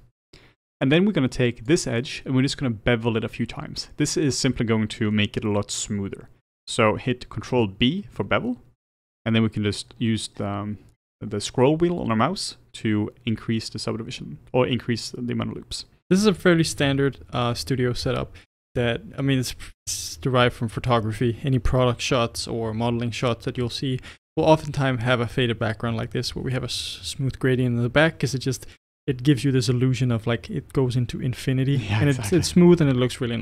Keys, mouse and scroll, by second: 0.2-1.7 middle drag, 1.7 click, 2.0-8.0 middle drag, 8.0 ctrl+b, 17.3-19.1 middle drag, 19.1 Tab, 25.9-28.9 middle drag, 32.7-33.4 middle drag.